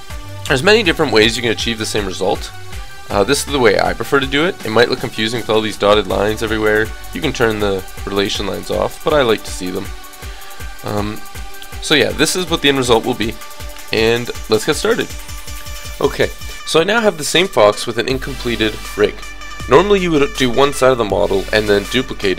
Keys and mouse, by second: 4.0 g, 5.4-7.4 middle drag, 7.5 middle click, 11.4 KP_3, 12.8 g, 13.8 click, 14.9 click, 15.7-17.6 drag.